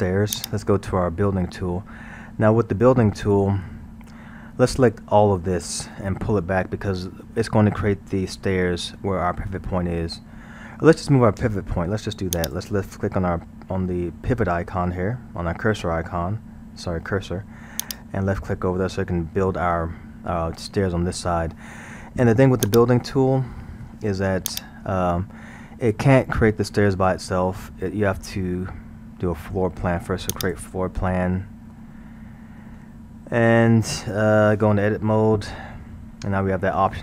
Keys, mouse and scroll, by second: 0.3-2.2 drag, 2.2 scroll, 2.6-5.5 middle drag, 5.5-6.0 scroll, 6.9-12.4 middle drag, 12.4-12.9 drag, 17.8 click, 18.7-22.7 middle drag, 22.7 click, 24.5 click, 30.4 click, 31.4-34.4 middle drag, 35.7 Tab.